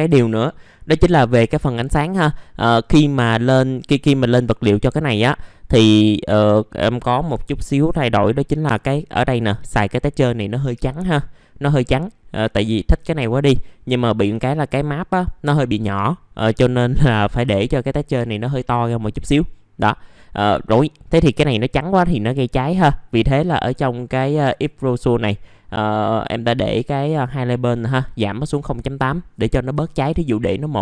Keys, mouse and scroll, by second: 2.8 scroll up 1, 4.9 middle click, 5.8 scroll down 1, 8.1 scroll up 1, 9.7-12.1 scroll down 1, 12.1-19.3 scroll up 1, 19.3-19.7 scroll down 1, 19.7 middle click, 20.6-22.4 scroll up 1, 23.1-27.8 drag, 27.8 click, 29.7 KP_1.